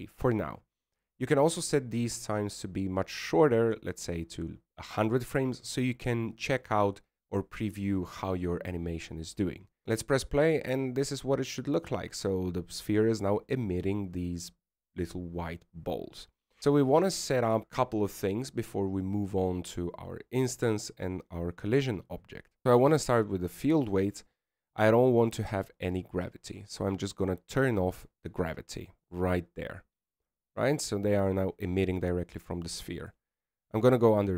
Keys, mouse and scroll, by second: 11.7 alt+a, 23.6 click, 24.3 click, 25.8 click, 27.0 click, 31.1 click.